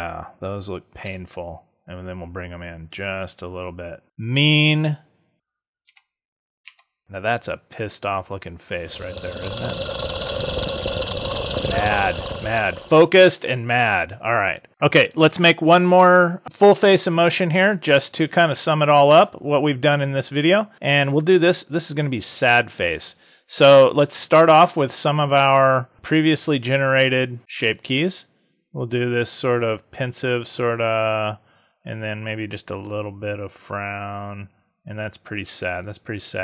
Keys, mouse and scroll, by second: 1.0 g, 4.0 click, 5.8 a, 6.6 Tab, 10.0 click, 10.7 z, 11.5 click, 25.9 click, 27.7 click, 32.5 click.